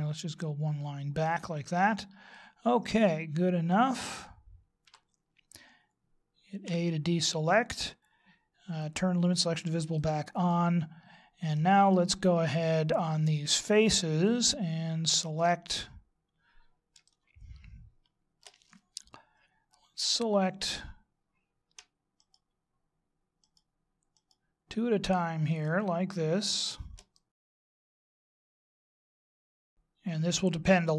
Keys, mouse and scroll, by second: 2.3 middle click, 4.9 KP_3, 6.6 a, 9.8 click, 10.5 middle click, 15.2 right click, 15.7-17.0 scroll up 4, 17.0 shift+middle click, 22.1 shift+right click, 23.4 shift+right click, 24.1 shift+right click, 25.5 shift+right click, 26.5 shift+right click, 27.1 middle click, 27.6 shift+right click, 27.7 shift+right click, 28.0 shift+right click, 28.2 shift+right click, 28.3 middle click, 28.7 shift+right click, 28.8 shift+right click, 29.0 shift+right click, 29.2 shift+right click, 29.4 middle click, 30.3 shift+right click.